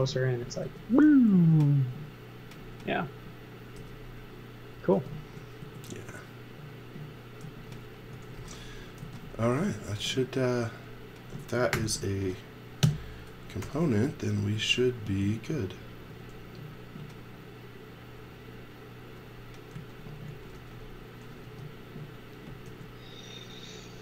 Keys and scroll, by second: 0.0-0.6 typing, 3.7 b, 4.7 space, 5.3 s, 7.4-9.4 typing, 10.4 space, 11.7 shift+g, 12.8 Return, 13.6 m, 19.7 z, 20.3 x, 20.5 v, 21.4 space, 22.7 l.